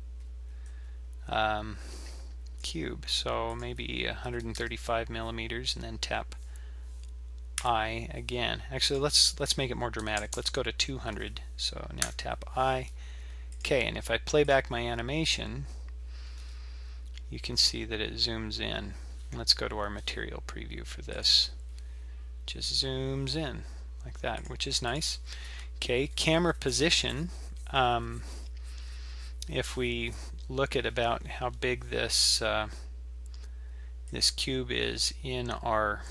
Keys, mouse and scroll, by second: 3.5 click, 8.9 click, 10.4 KP_0, 13.5 click, 14.5 click, 19.2 z, 21.2 click, 24.4 click, 24.9-27.9 drag, 34.1 click.